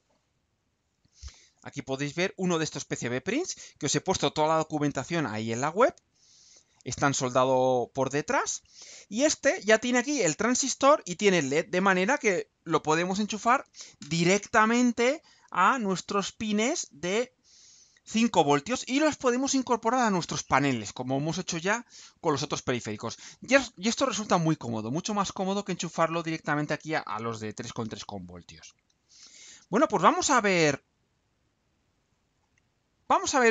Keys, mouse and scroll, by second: 31.6 click, 32.0-32.6 scroll down 4, 33.0 scroll down 2.